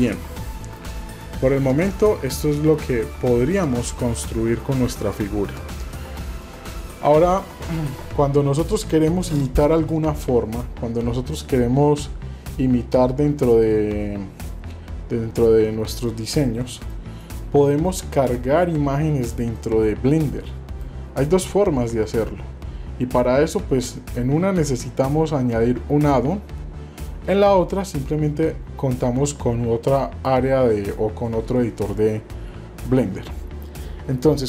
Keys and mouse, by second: 0.2-0.8 middle drag, 1.2-1.5 shift+middle drag, 2.0 shift+middle click, 2.7 middle click, 3.2 shift+middle click, 4.8 middle click, 16.0 middle click, 16.7 shift+middle click, 17.2 middle click, 17.7 middle click, 19.5-20.8 middle drag.